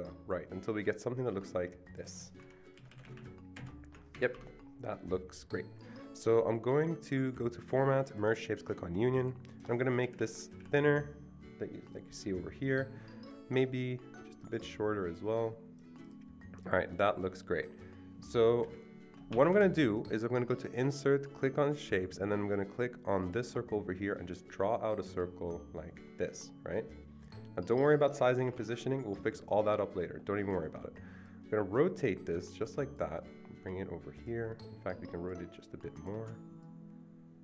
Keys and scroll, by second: 2.7 ctrl+Right, 2.9 ctrl+Right, 3.0 ctrl+Right, 4.1 Escape, 10.0 shift+Left, 10.2 shift+Left, 10.3 shift+Left, 11.0 shift+Left, 18.6 shift+Down, 19.3 Escape, 19.5 Escape, 28.3 Escape, 28.5 Escape, 30.9 Escape.